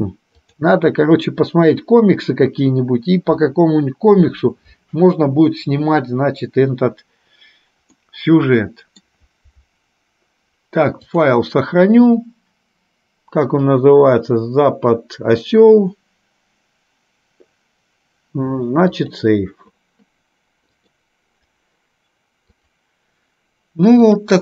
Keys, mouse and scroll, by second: 0.6 click, 8.1-9.2 middle drag, 11.1-19.5 drag, 21.0 click, 22.7 click, 24.1 click.